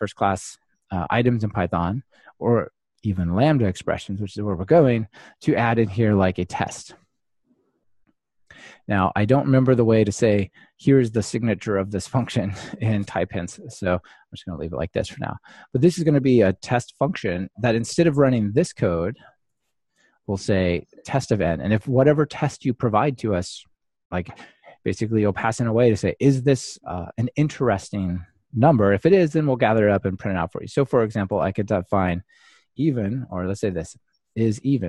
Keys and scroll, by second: 15.1 ctrl+alt+shift+Left, 20.2 super+v, 21.8 super+v, 25.8 Escape.